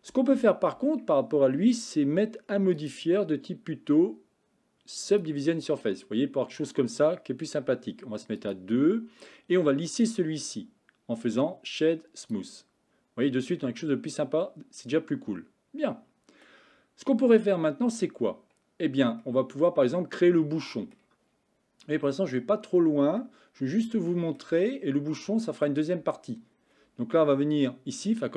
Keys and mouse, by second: 0.8 Tab, 2.9-5.3 drag, 8.6 click, 9.9-12.4 right drag, 13.3-16.5 middle drag, 19.3-21.0 middle drag, 23.2-24.4 shift+middle drag, 26.1 Tab.